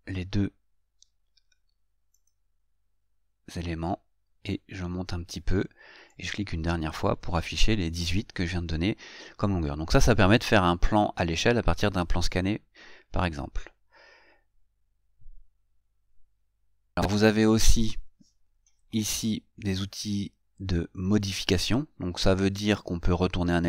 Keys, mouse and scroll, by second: 2.4 click.